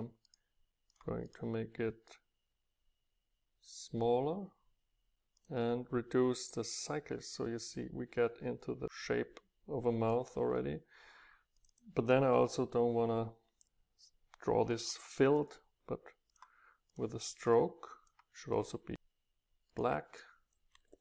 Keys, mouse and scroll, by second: 2.2 middle click, 3.4 right click, 3.6 right click, 3.8 right click, 6.5 right click, 6.7 right click, 6.8 middle click, 6.9 right click, 7.4-10.8 middle drag, 11.6-13.8 middle drag, 14.9-17.2 drag, 17.2 middle click, 17.6 click, 19.8-21.0 right drag.